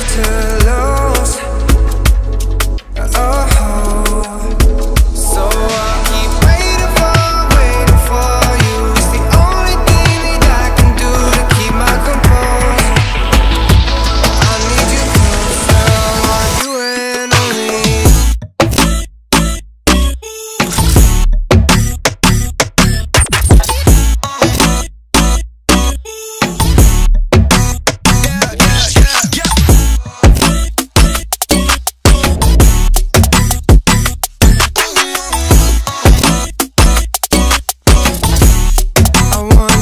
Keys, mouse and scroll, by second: 1.7-2.0 alt+scroll up 1, 2.8 alt+scroll up 1, 4.2 click, 6.1 [, 6.2 [, 6.6 click, 7.0 x, 7.5 click, 9.1 v, 9.5 alt+scroll down 1, 10.3 click, 11.7 ctrl+z, 12.5 click, 13.1 ], 13.2 ], 13.3 ], 13.5 ], 14.8 click, 15.4 v, 15.8 ctrl+t, 16.2 click, 17.0 ctrl+z, 17.6-19.6 alt+shift+drag, 19.8-22.1 alt+shift+drag, 22.1 alt+shift+click, 22.8 alt+shift+click, 25.6 click, 30.2-34.5 drag, 32.9 typing, 35.4 typing, 36.6 alt+Num_Lock, 36.6 click, 36.6 alt+scroll up 1, 37.1 alt+scroll up 1, 37.9 click, 39.0 b.